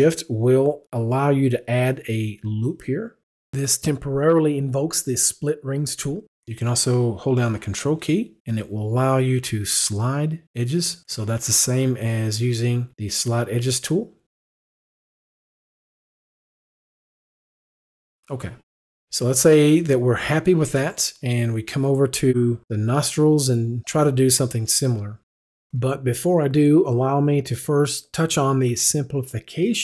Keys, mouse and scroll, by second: 4.7 ctrl+shift+click, 7.8 ctrl+click, 16.5 right click, 17.1 right click.